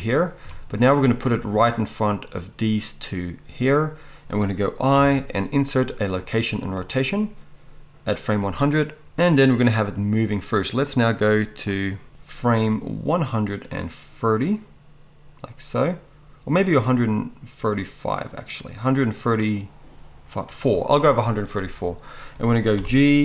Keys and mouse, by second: 4.9 i, 10.8-23.2 drag, 22.7 g.